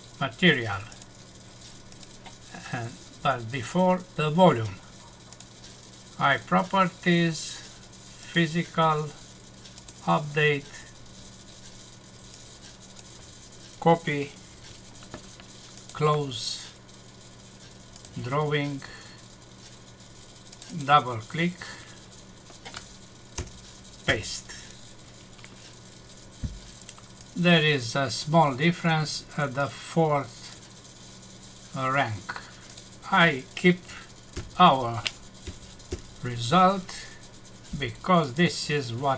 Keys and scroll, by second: 14.5 ctrl+c, 23.4 Return, 24.1 ctrl+v, 34.3 shift+End, 35.4 Delete.